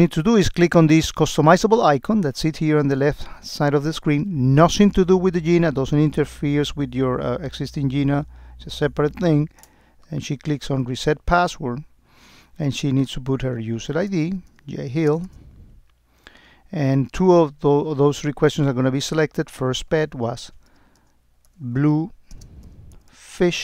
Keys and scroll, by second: 22.4 space.